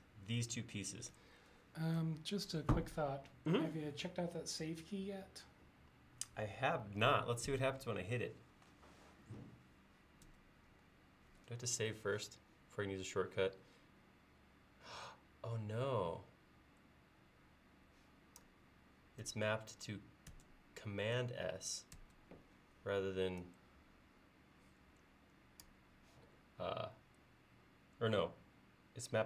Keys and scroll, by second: 7.5 ctrl+s, 10.3 ctrl+s, 19.3 ctrl+s, 20.3 ctrl+s, 22.0 ctrl+s.